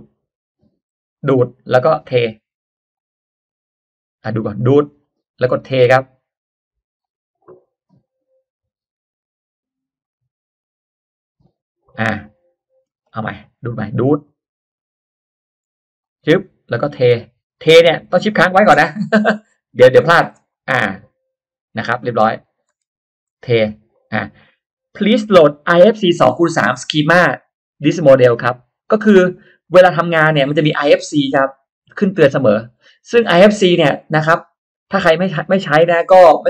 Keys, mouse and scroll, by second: 1.1 click, 2.9 click, 4.8 click, 5.9 click, 6.9 click, 8.0 click, 10.0 click, 11.4 click, 12.5 click, 12.9 middle click, 14.2 click, 15.9 click, 16.9 click, 19.2 shift+middle click, 19.2-19.5 shift+scroll up 2, 20.5 click, 21.7 click, 23.5 click, 29.1 click, 31.8-32.1 scroll down 1, 32.7 middle click, 33.2-33.5 scroll up 1.